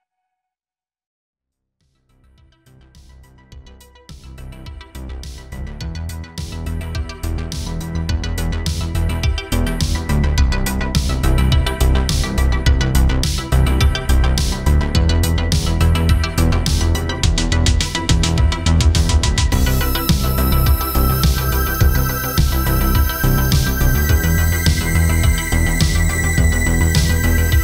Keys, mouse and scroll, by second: 0.2 click, 0.9 click, 1.7-2.5 scroll down 9, 2.3 middle click, 2.5 scroll up 1, 2.8 scroll down 9, 3.2-6.1 click, 6.5 click, 7.9 click, 8.4 click, 8.7 click, 9.1 click, 13.8 scroll up 1, 14.1 shift+middle click, 14.5 shift+a, 15.9-20.1 click, 20.1 middle click, 20.5 shift+middle click, 21.0 click, 23.9 shift+d, 24.6 click, 26.1 shift+d, 27.0 click.